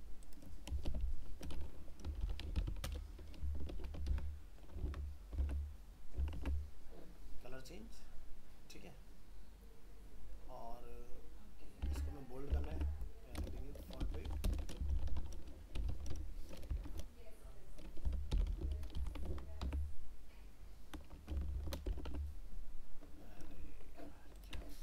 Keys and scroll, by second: 4.1 ctrl+v, 5.4 alt+Tab, 11.8 alt+Tab, 19.3 ctrl+s, 19.7 alt+Tab, 21.3 ctrl+s, 22.0 alt+Tab.